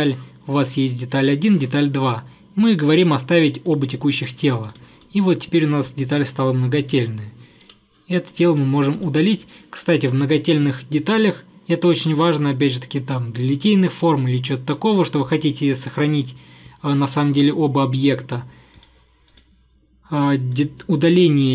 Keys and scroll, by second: 7.7 Delete.